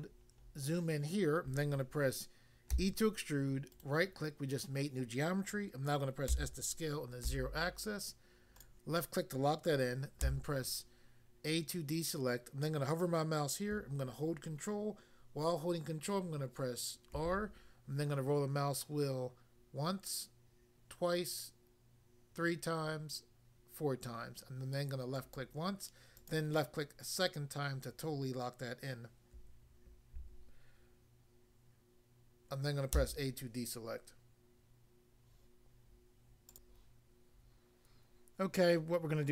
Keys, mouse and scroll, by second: 0.0 scroll up 1, 2.7 e, 3.8 right click, 6.2 s, 7.3 0, 8.6 click, 8.7 click, 10.2 a, 17.1 ctrl+r, 19.7-20.7 scroll up 1, 20.7 scroll up 1, 22.0 scroll up 1, 23.4 scroll up 1, 25.2 click, 25.4 click, 26.2 click, 26.3 click, 32.9 a, 36.5 click, 36.6 click.